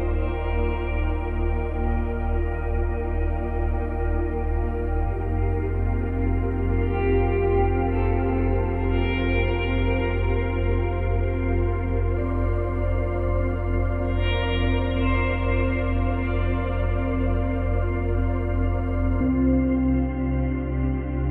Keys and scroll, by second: 15.3 space, 16.9 space.